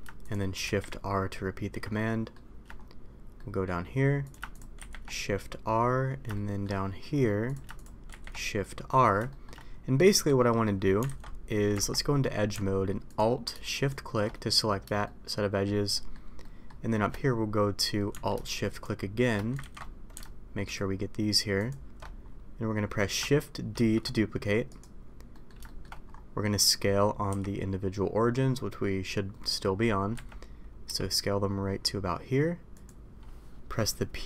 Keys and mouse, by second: 0.7 shift+r, 1.9 shift+middle click, 3.3 middle click, 4.8 shift+r, 6.3-6.6 middle drag, 8.1 shift+r, 9.3 middle click, 11.0 alt+a, 11.7 Tab, 15.0-15.6 shift+middle drag, 15.9 shift+middle drag, 16.4 shift+middle drag, 16.9 shift+middle click, 19.6 ctrl+z, 23.8 shift+d, 25.3 middle click, 25.6 shift+middle click, 27.3 s, 30.8 s.